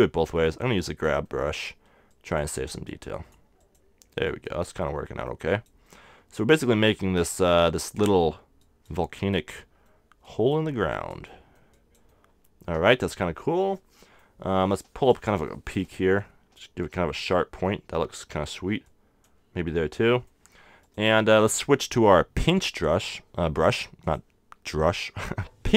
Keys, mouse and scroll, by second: 4.0-9.9 middle drag, 13.4-19.7 middle drag, 14.7-18.7 drag, 18.8-20.7 drag, 20.7 middle click, 20.8-22.7 drag.